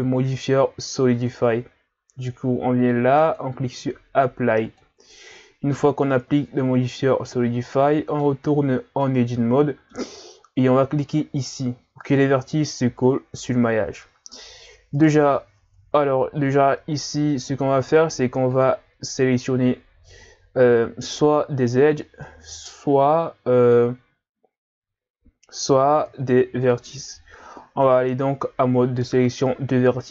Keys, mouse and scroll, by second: 7.0-7.7 ctrl+scroll up 3, 7.7-8.5 middle drag, 8.5 Tab, 9.0-11.1 middle drag, 11.1 click, 14.0 middle click, 15.0 right click, 15.6 ctrl+Tab, 22.2-25.2 middle drag, 26.1 ctrl+Tab, 27.1-30.1 middle drag.